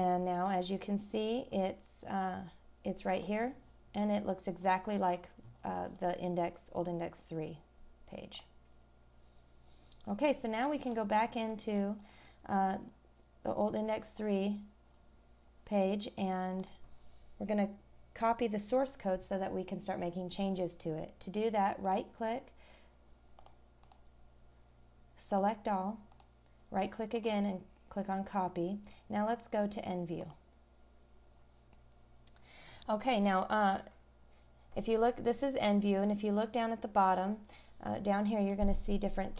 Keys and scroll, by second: 1.5 scroll down 1, 4.6 scroll down 1, 5.4-6.0 scroll up 1, 10.6 scroll down 1, 14.1-14.6 scroll down 1, 14.9 scroll up 1.